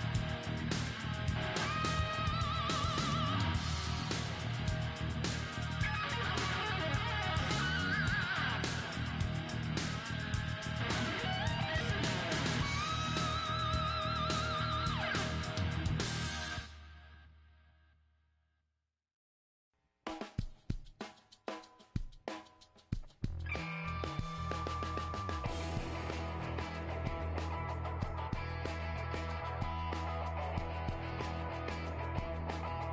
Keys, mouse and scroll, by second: 4.7-6.8 right drag, 5.7-6.8 middle drag, 6.8 click, 6.8 g, 7.1-8.3 middle drag, 10.6-12.5 middle drag, 11.6 right click, 13.4 Tab, 15.6 Tab, 16.3-18.6 right drag, 17.2 g, 19.2 s, 20.2-21.7 middle drag, 22.2 g, 23.2 s, 24.3-24.7 scroll up 1, 24.8 middle click, 25.5-26.5 drag, 25.5-27.0 right drag, 25.8 g, 26.7 click, 27.0 middle click, 27.8 Tab, 27.9-29.9 right drag, 29.5 s, 29.7 middle click, 30.4-32.3 middle drag, 31.0 g.